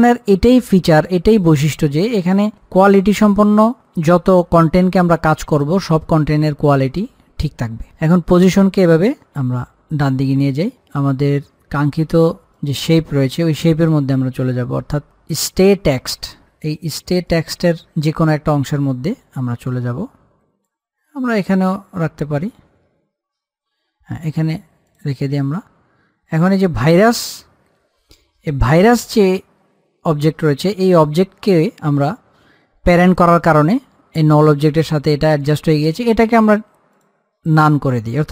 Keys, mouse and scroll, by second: 2.4 shift+Num_Lock, 2.4-8.2 shift+drag, 8.2-17.6 drag, 17.6-25.0 drag, 26.0-28.8 scroll down 1, 29.3-31.4 drag, 31.4-33.3 scroll up 1, 37.2 click.